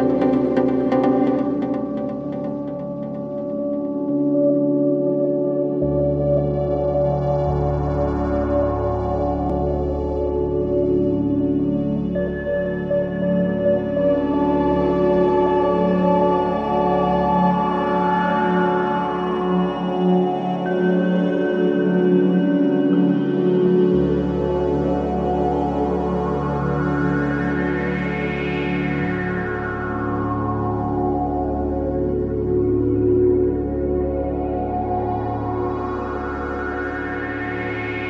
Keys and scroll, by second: 2.4 3, 6.3 ], 19.6 Delete, 20.3 ctrl+z, 26.3 4, 29.1 2, 34.3 4.